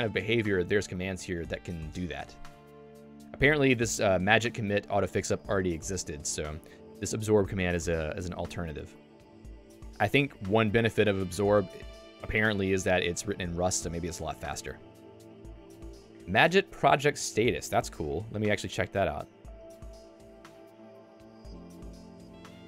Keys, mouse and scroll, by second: 18.0 super+1.